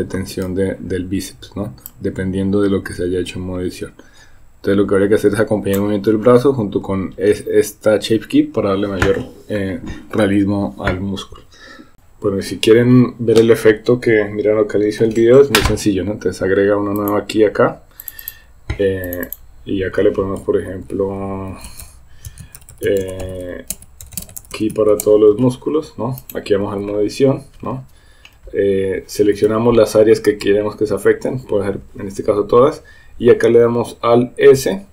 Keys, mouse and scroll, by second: 2.0-5.9 drag, 17.0 click, 18.3 click, 19.4-25.5 drag, 22.7 l, 24.1 BackSpace, 26.2 click, 26.7 Tab, 30.5 a, 34.6 alt+s.